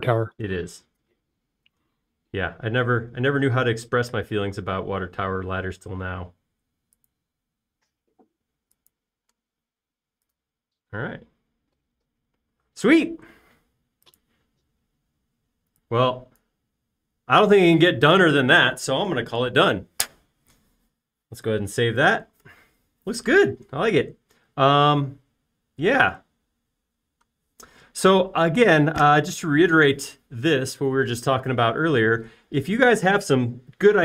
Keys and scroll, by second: 10.4 space, 22.8 super+s.